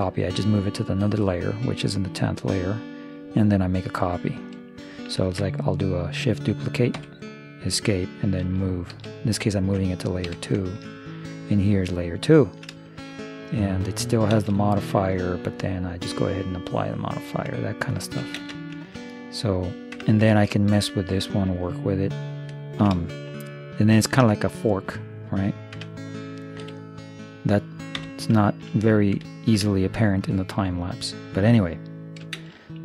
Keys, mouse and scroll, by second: 0.4 0, 1.6 KP_0, 1.9 right click, 2.5-4.1 middle drag, 5.3 shift+d, 8.4 m, 9.6 middle click, 10.4 2, 14.4 shift+space, 17.1-18.8 drag, 18.4 shift+space, 19.2-20.2 drag, 19.2-20.2 right drag, 20.0 Tab, 20.2-22.4 middle drag, 22.6-25.2 middle drag, 25.8 Tab, 26.6 x, 28.0 1, 28.6-30.5 middle drag, 31.0-32.6 right drag, 32.4 shift+space.